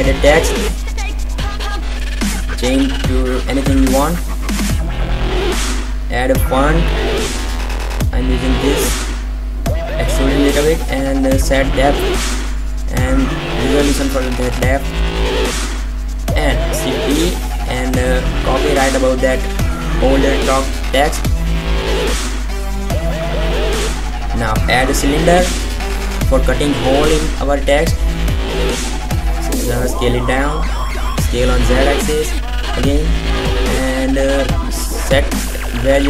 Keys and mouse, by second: 0.9 Tab, 1.0 BackSpace, 1.3 shift+j, 1.4 shift+a, 1.5 shift+y, 1.6 Tab, 3.0 click, 3.3 click, 7.1 click, 7.5 click, 9.8-11.8 drag, 11.8-14.5 middle drag, 14.5 shift+d, 15.6-16.5 drag, 17.0 middle click, 17.3-18.5 middle drag, 18.5-20.0 drag, 20.0-20.6 middle drag, 22.2 shift+a, 26.6 s, 28.6 s, 30.1 s, 31.3-32.5 middle drag, 32.5 KP_5, 32.9 KP_7, 34.6 g.